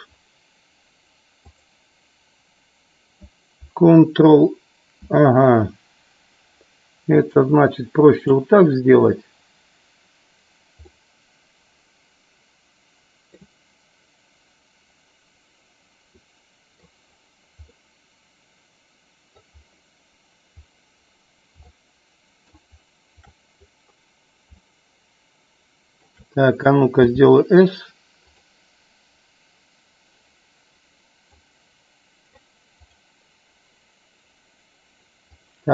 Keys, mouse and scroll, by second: 1.4 click, 7.3 click, 10.8-13.6 middle drag, 13.3 scroll down 1, 16.3 middle click, 16.7 scroll down 1, 17.7-19.5 middle drag, 17.7 scroll up 1, 21.7-22.6 shift+middle drag, 24.7-26.1 shift+middle drag, 28.3 click, 31.3-32.5 drag, 35.4-35.7 drag.